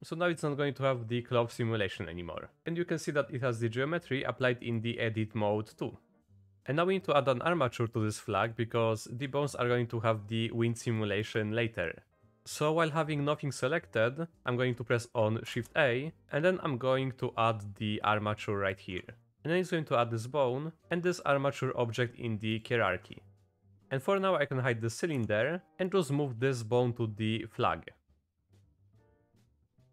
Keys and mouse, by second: 4.5 middle click, 5.8 middle click, 7.9-8.6 middle drag, 8.8 middle drag, 11.1 middle click, 12.1 click, 12.6 click, 15.5 shift+a, 20.0-21.5 drag, 22.5 click, 24.0 click, 25.2 h, 25.7 click, 26.6-27.6 drag, 28.7 click, 28.9 g.